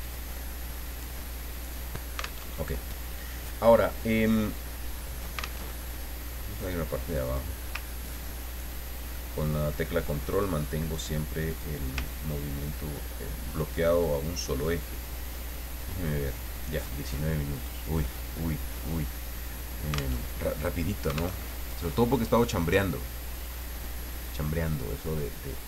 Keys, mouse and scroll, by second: 0.0-1.8 drag, 2.5 alt+Tab, 5.6 alt+Tab, 7.2 click, 7.8-10.7 ctrl+drag, 11.5 click, 12.0-14.7 ctrl+drag, 15.7 click, 16.5 click, 20.2 alt+Tab, 21.4 alt+Tab, 22.1 click, 23.3 click.